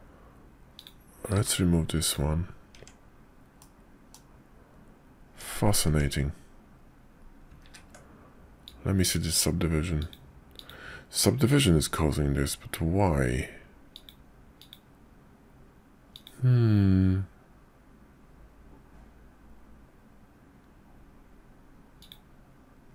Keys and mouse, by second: 0.7 click, 1.3 q, 2.7 Tab, 3.6 middle click, 5.3 Tab, 5.9 Tab, 7.6 ctrl+`.